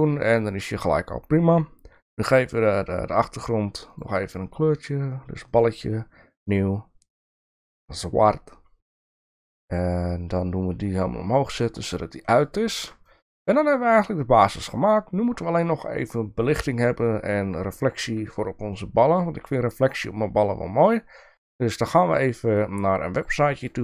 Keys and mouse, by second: 3.9 click, 5.5 click, 11.1 click, 12.4 click, 13.1-13.5 shift+middle drag.